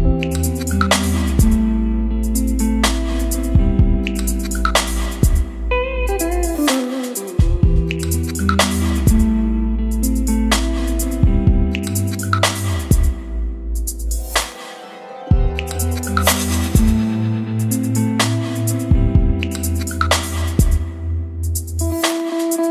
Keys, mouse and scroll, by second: 1.3-6.5 typing, 8.5-13.4 typing, 9.6 ctrl+space, 13.6 Return, 15.7-22.7 drag.